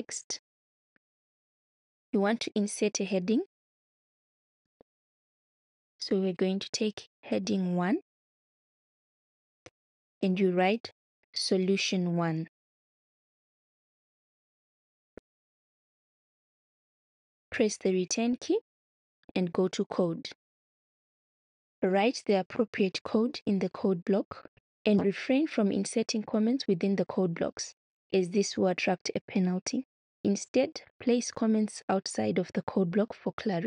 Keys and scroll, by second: 11.4-16.2 typing, 17.7 Return.